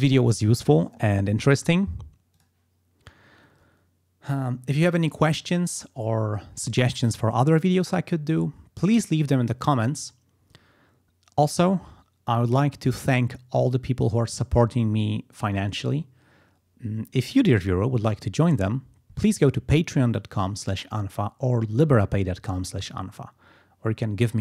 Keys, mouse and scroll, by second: 2.5 click.